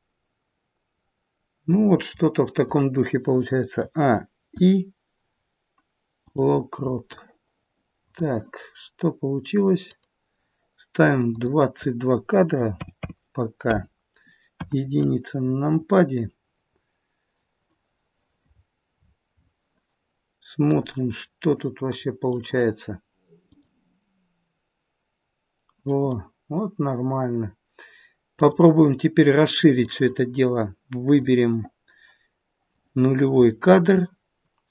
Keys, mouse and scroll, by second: 3.7 a, 4.4 i, 7.9 click, 11.2 click, 12.9 KP_2, 15.3-16.0 scroll down 3, 15.3 KP_1, 16.0-16.6 scroll down 1, 16.6-17.6 scroll up 2, 17.6-18.5 scroll up 1, 18.5-20.7 scroll down 13, 20.7 click, 22.4 click, 23.3 click, 28.3 click, 29.7 click, 34.0 click, 34.0-34.5 scroll down 1.